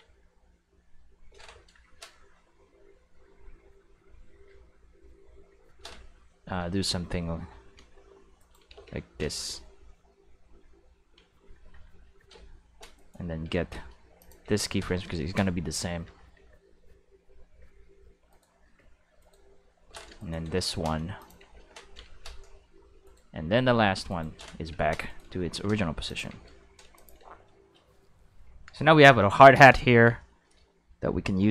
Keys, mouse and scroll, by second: 8.4 right click, 8.7 shift+s, 12.9 right click, 13.5 shift+d, 14.2 click, 14.4 shift+s, 18.3 right click, 19.2 right click, 20.2 right click, 20.6 shift+d, 21.2 click, 21.4 shift+s, 23.0 right click, 25.0 right click, 25.4 shift+d, 26.0 click, 26.3 shift+s, 26.9 click, 27.1 space, 28.3 q, 29.5 space, 30.3 shift+middle click.